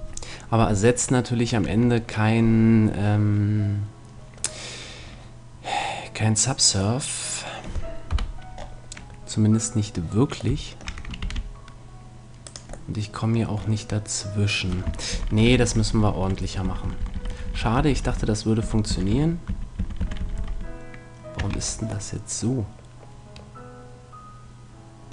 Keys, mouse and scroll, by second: 1.7 Tab, 3.1-4.8 middle drag, 7.0-8.7 middle drag, 8.1 KP_1, 11.2 ctrl+r, 12.9-14.7 middle drag, 15.1 ctrl+z, 15.3 ctrl+z, 15.5 ctrl+z, 15.6 ctrl+z, 15.7 ctrl+z, 15.9 ctrl+z, 16.1 ctrl+z, 16.2 ctrl+z, 16.4 ctrl+z, 16.7 ctrl+z, 16.9 ctrl+z, 17.0 ctrl+z, 17.1 ctrl+z, 17.3 ctrl+z, 17.5 ctrl+z, 17.6 ctrl+z, 17.7 ctrl+z, 17.9 ctrl+z, 18.1 ctrl+z, 18.6 ctrl+z, 18.9 ctrl+z, 19.1 ctrl+z, 19.5 ctrl+z, 19.8 ctrl+z, 20.0 ctrl+z, 20.2 ctrl+z, 20.4 ctrl+z, 21.5 Tab.